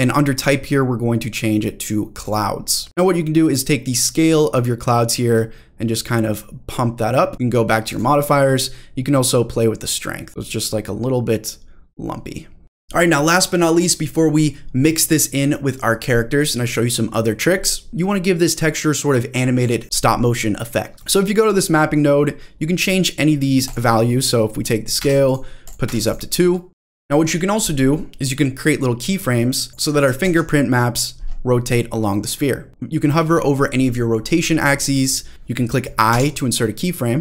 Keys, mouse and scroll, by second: 0.3-2.3 drag, 2.8 scroll up 1, 4.4-7.3 drag, 7.9 click, 9.2-10.3 drag, 12.6-14.3 scroll down 3, 17.9 middle click, 17.9-18.3 scroll down 1, 20.9 middle click, 21.7 middle click, 23.6-25.3 drag, 25.6 click, 26.7 scroll down 1, 27.8-29.1 scroll down 1, 29.1 click, 30.2 ctrl+z, 31.7-32.7 drag, 35.3 ctrl+z, 35.3 click, 36.1 i.